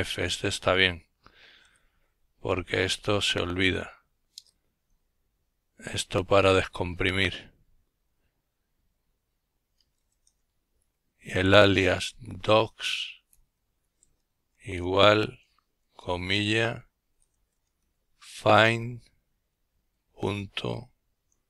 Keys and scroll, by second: 0.0-0.7 typing, 3.5 Return, 8.6-13.6 typing, 15.0-17.3 typing, 19.0 typing, 20.7-21.4 typing.